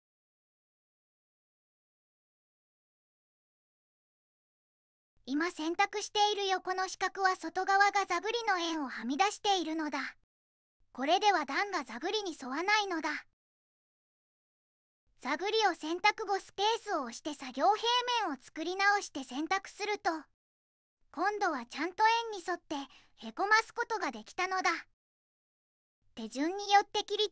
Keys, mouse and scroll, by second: 0.0-0.3 typing, 1.7 Return, 3.7 click, 6.3 shift+click, 7.4 click, 8.6 middle click, 10.1 click, 11.3 middle click, 14.1 Escape, 15.1 click, 15.9 Escape, 16.7 click, 17.8 space, 18.7 middle click, 21.2 click, 22.0 shift+click, 22.9 click, 25.6-26.6 typing.